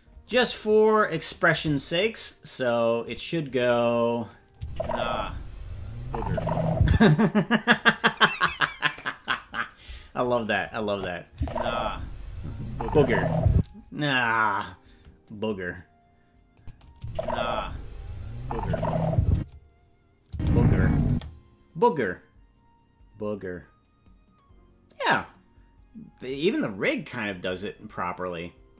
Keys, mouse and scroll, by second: 3.0 click, 4.1 click, 4.5 space, 6.8 space, 10.9 click, 11.3 space, 13.5 space, 16.6 click, 16.9 space, 19.3 space, 20.2 space, 21.1 space.